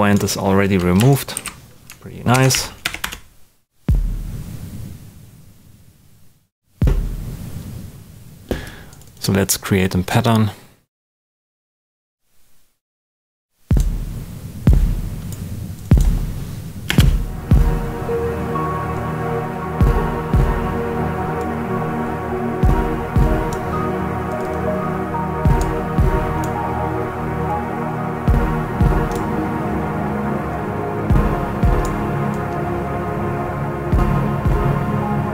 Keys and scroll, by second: 1.3 super+a, 1.8 shift+super+a, 2.3 shift+super+d, 2.5 shift+#, 2.8 i, 3.0 Return, 16.8 space.